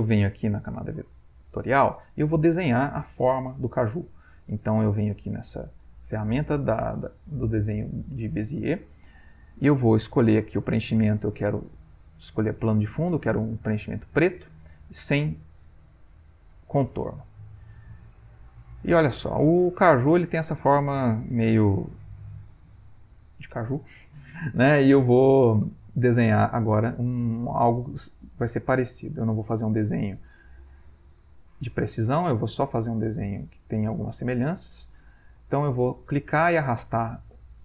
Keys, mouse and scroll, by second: 5.4 click, 10.6-14.2 drag, 17.4-18.8 ctrl+middle drag, 17.4-18.8 scroll up 1, 18.8 ctrl+scroll up 1, 22.2-23.5 middle drag, 22.2 scroll up 1, 23.8 ctrl+middle click, 24.4 middle click, 26.9 middle click, 29.0 click, 29.8-31.2 drag, 32.8-33.9 drag, 34.7-36.2 drag, 36.6-37.6 drag.